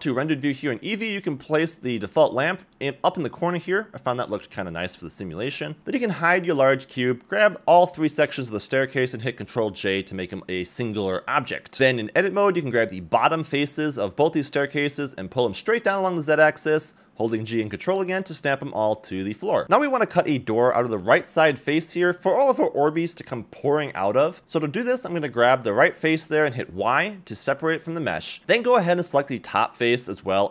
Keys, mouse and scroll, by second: 0.7 click, 1.5 g, 4.0 middle click, 4.7 g, 5.8 click, 6.8 h, 7.5 Tab, 7.5 middle click, 7.5-7.9 scroll down 1, 8.0 shift+click, 8.3 shift+click, 10.2 ctrl+j, 11.4 g, 11.7 Tab, 11.7 middle click, 12.1 shift+click, 12.6 shift+click, 13.5 middle click, 13.9 g, 15.5 middle click, 16.5 shift+click, 16.8 middle click, 17.1 g, 19.1 Tab, 19.3 a, 19.5 a, 19.8 scroll down 1, 19.9 middle click, 20.2 click, 20.2 scroll up 2, 20.2 z, 20.6-22.3 middle drag, 23.4 y, 24.1 g, 25.7 shift+middle click, 26.1-26.8 scroll up 2, 26.8 ctrl+r, 27.1 middle click, 29.0 click, 29.8 x.